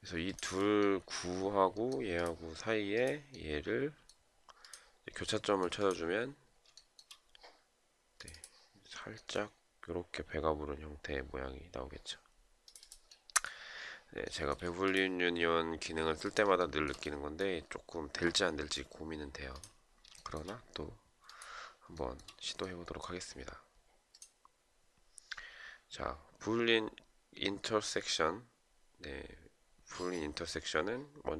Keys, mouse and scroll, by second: 6.3 shift+right click, 13.8 shift+right click, 16.1 shift+right click, 19.7 shift+right click, 21.5 shift+right click.